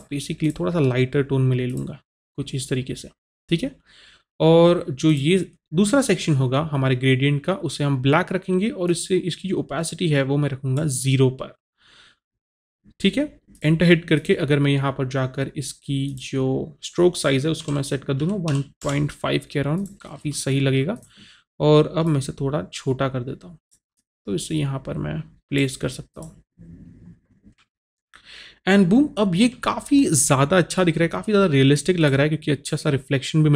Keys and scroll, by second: 13.4 Return, 17.6 KP_1, 18.2 KP_Decimal, 18.5 KP_5, 18.8 Return.